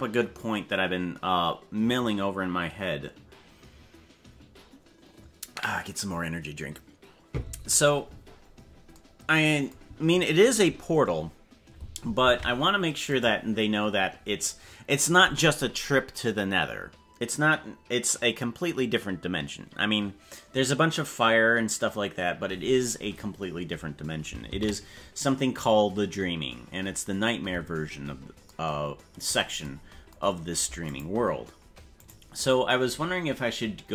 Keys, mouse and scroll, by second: 12.3 ctrl+Tab, 13.1 right click, 13.9-15.3 scroll down 15, 26.5 ctrl+s, 30.8 click, 32.0 right click.